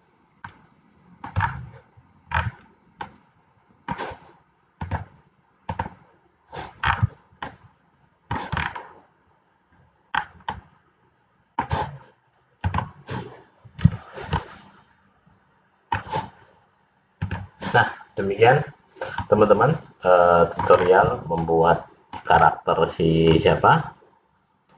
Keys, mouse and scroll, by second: 0.6 middle click, 1.4-1.8 scroll down 3, 2.5 scroll down 4, 3.2 middle click, 5.0 click, 7.0-7.6 scroll down 5, 7.6 middle click, 8.8-9.4 scroll up 4, 10.6 middle click, 13.7 click, 14.6 middle click, 18.6 click, 19.3 middle click, 20.9 scroll down 4, 21.6 middle click, 22.4 scroll up 4, 23.3 scroll up 1, 23.5 middle click.